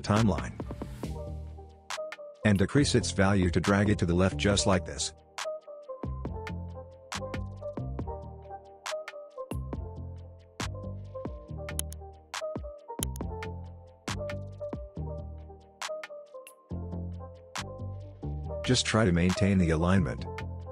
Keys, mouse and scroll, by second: 1.5-3.3 drag, 11.5-12.7 drag, 18.0-18.7 scroll up 1, 18.7 scroll down 1, 18.9 space, 19.0-19.6 click, 19.4 space, 20.6-20.7 scroll down 1.